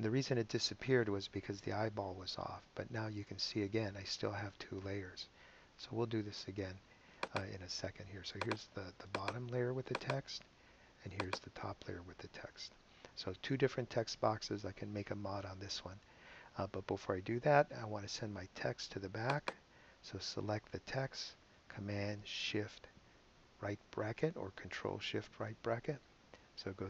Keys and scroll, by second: 26.1 shift+super+[.